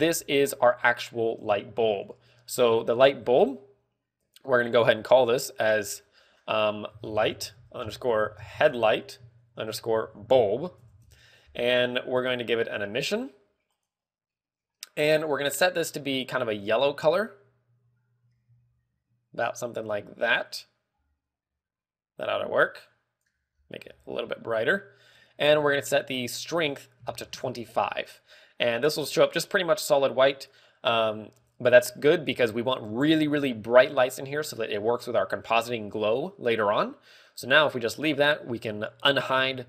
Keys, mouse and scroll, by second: 0.9 right click, 4.8 click, 5.2 click, 6.2 click, 13.3 click, 16.0 click, 17.1 click, 26.8 ctrl+click.